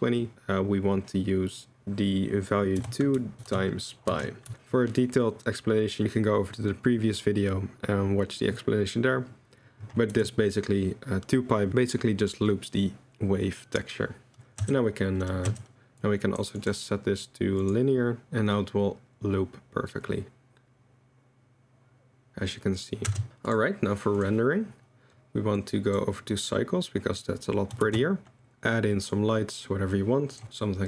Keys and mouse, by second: 0.3-3.2 drag, 3.5 click, 10.1 i, 14.6 space, 14.9-15.7 drag, 16.0-16.5 drag, 16.7-18.2 drag, 18.2 v, 18.2 space, 23.1 space, 23.9 click, 25.5 click, 27.8 shift+a, 30.4 ctrl+v.